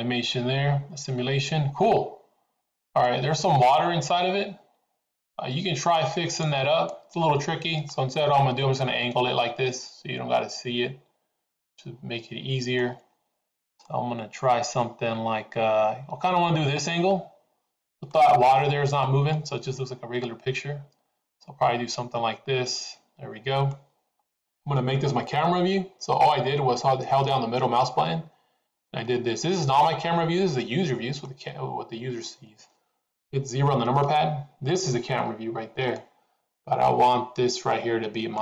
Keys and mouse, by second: 3.1-3.9 middle drag, 6.2 click, 6.9-12.9 middle drag, 13.8-18.0 middle drag, 19.3-23.8 middle drag, 26.2-31.3 middle drag, 34.0 KP_0, 36.0-38.4 middle drag.